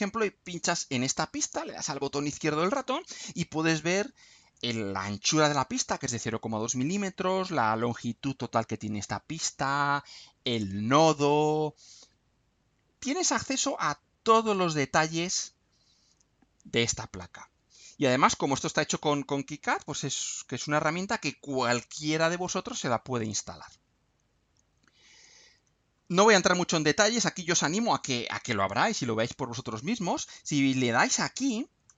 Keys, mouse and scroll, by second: 0.4 click, 11.2-11.8 scroll down 2, 13.2 scroll down 2, 19.8 scroll down 2, 20.4 scroll up 2, 24.2 scroll up 2, 27.3 scroll up 2, 28.8-29.2 scroll up 2, 29.2-29.6 scroll down 2, 31.8 click.